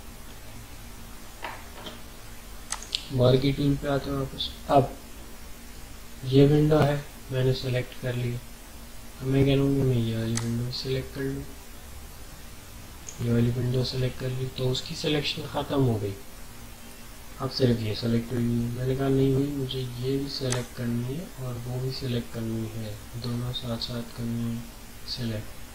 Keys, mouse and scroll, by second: 0.6 typing, 2.7 click, 10.4-15.6 drag, 20.5-25.7 drag.